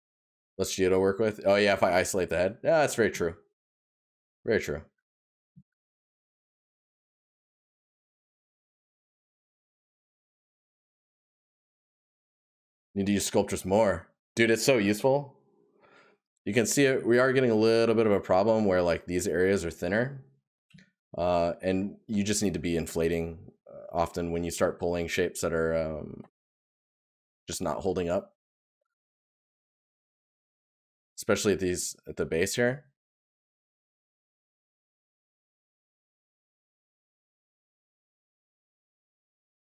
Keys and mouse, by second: 5.0 right click, 8.3 right click, 16.2 right click, 19.0 right click, 36.9 right click.